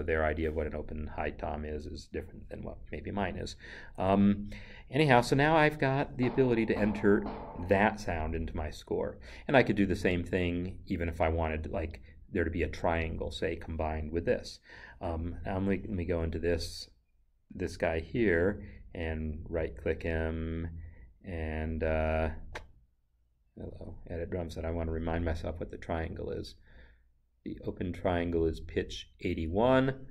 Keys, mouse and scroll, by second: 6.6 Right, 10.5 click, 12.6 click, 16.1 click, 18.3 right click, 22.7 right click, 24.1 click.